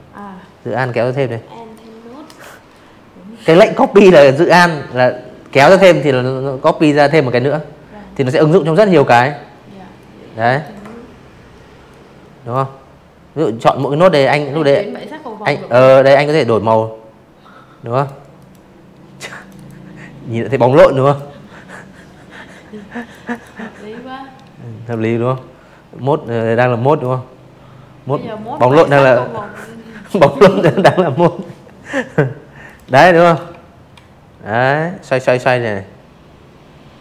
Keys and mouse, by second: 6.9 click, 8.8 click, 10.6 click, 11.0 click, 12.7 click, 14.9 click, 15.3 click, 16.3 click, 16.5 click, 17.6-18.1 drag, 19.9 click, 20.2 click, 23.1-23.9 drag, 25.5 click, 29.5 click, 30.3-37.0 shift+drag.